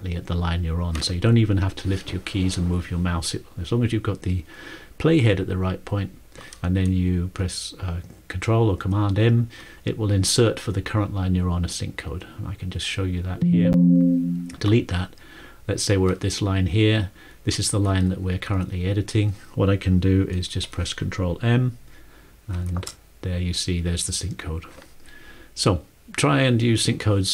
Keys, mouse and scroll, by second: 13.1 ctrl+click, 14.2 ctrl+click, 17.1 ctrl+click, 18.3 ctrl+Left, 22.5 ctrl+m.